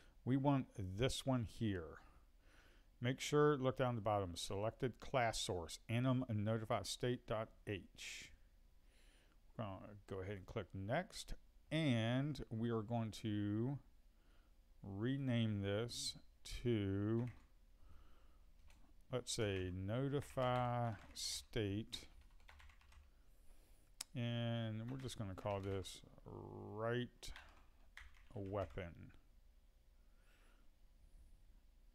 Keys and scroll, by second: 2.6 typing.